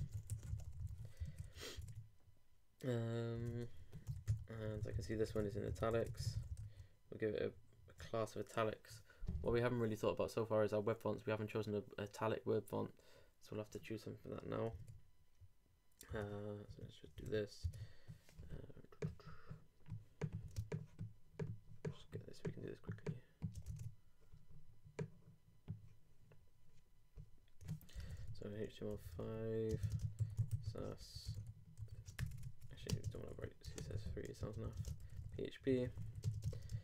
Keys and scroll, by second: 0.0-0.6 typing, 1.2 super+r, 1.2 super+Right, 1.4 super+Return, 1.8 super+Tab, 3.5 super+Tab, 3.6 super+Return, 14.8 super+Tab, 16.1 super+Tab, 23.8 super+Tab, 27.8-32.3 typing, 33.6-36.8 typing.